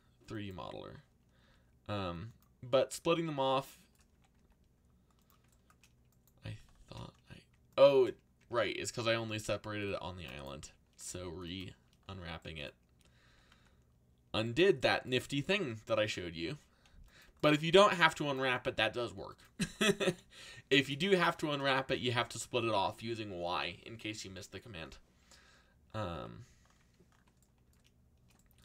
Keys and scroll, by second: 1.4 u, 3.8-4.8 typing, 8.4 y, 9.3 c, 11.1 u, 13.0-14.0 typing, 17.9 r, 19.4-20.9 typing, 26.1 a.